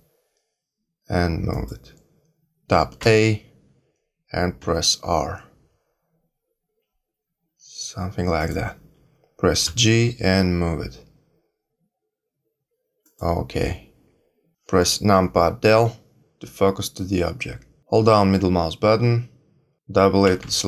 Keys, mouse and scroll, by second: 2.9 a, 4.6 r, 9.6 g, 15.7 KP_Decimal, 18.3 middle click, 20.2 a, 20.4 a.